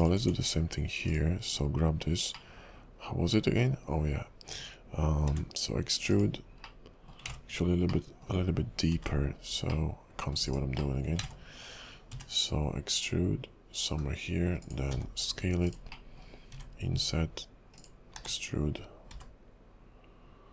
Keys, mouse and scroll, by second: 0.0 click, 0.2 Tab, 1.1 click, 1.6-2.4 scroll up 3, 2.5 middle click, 5.4 e, 6.8 middle click, 7.3 ctrl+z, 8.1 middle click, 8.4 KP_5, 9.0 e, 10.9 middle click, 12.2 e, 14.9 s, 16.1 middle click, 16.6 i, 18.1 w, 19.2 e.